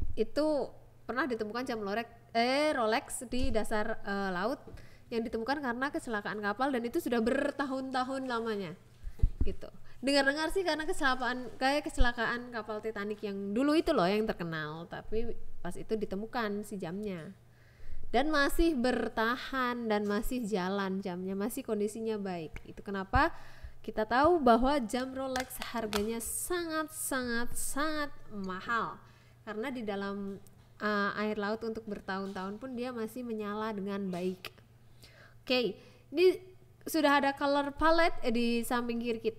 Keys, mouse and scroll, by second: 0.2 click, 0.5 click, 0.9 click, 3.1 click, 4.8 click, 5.1 click, 7.7 click, 9.1 click, 10.1 click, 11.5 click, 12.5 click, 14.1 click, 15.1 click, 15.7 click, 16.8 KP_0, 18.6 click, 19.3 click, 20.5 click, 21.7 click, 22.7 click, 23.1 click, 23.8-25.1 drag, 25.6 click, 26.3 click, 27.1 click, 27.5 click, 27.8 click, 28.1 shift+a, 29.9 click, 29.9 a, 30.3 click, 30.7 click, 31.0 click, 31.8 click, 32.3 click, 33.1 click, 33.7 shift+a, 35.4 c, 36.1 shift+a, 37.9 x, 38.4 shift+a.